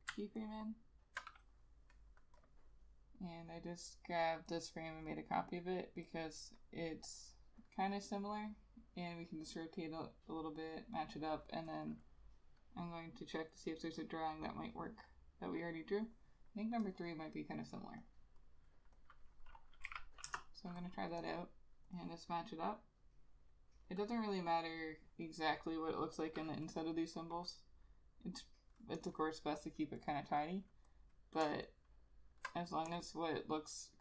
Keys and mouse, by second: 0.5 alt+click, 11.4 double click, 17.1 double click, 20.4 Return, 26.5 double click, 31.8 alt+click.